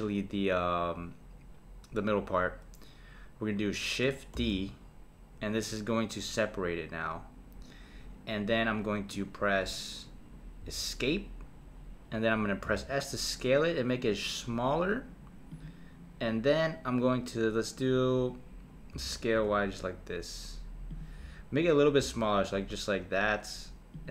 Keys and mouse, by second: 4.4 shift+d, 12.6 s, 18.9 s, 22.0 s.